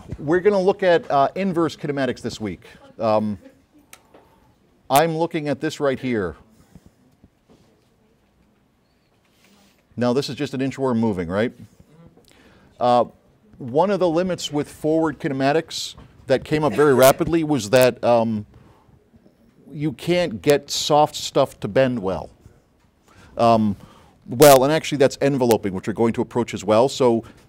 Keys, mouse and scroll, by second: 2.5 drag, 3.3 click, 4.0 click, 5.9 click, 13.0 click, 20.5 click.